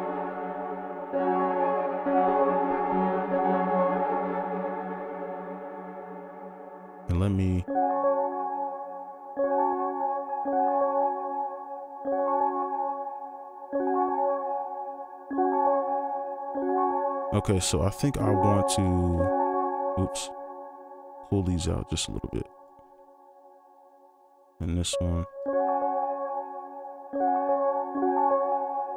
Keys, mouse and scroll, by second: 7.5 right click, 8.9 space, 20.7 alt+click, 21.5 alt+click, 24.2 alt+click, 24.9 alt+click, 25.4 space.